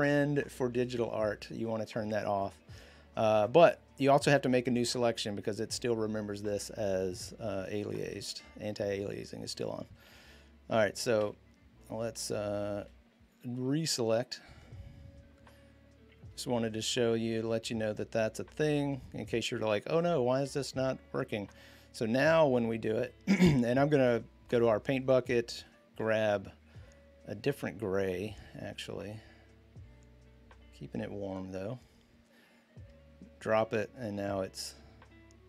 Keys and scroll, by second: 8.1 b, 9.8 ctrl+z, 11.0 v, 12.6 l, 23.8 g, 34.4 ctrl+x.